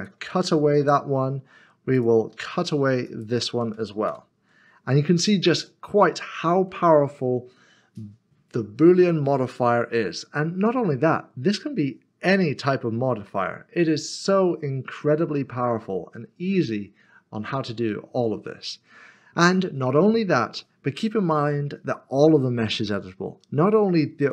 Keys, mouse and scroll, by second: 0.0 shift+click, 0.8 ctrl+-, 2.0 click, 3.0 shift+click, 4.1 ctrl+-, 5.1 scroll down 1, 5.8 middle click, 6.9 scroll up 1, 7.5 middle click.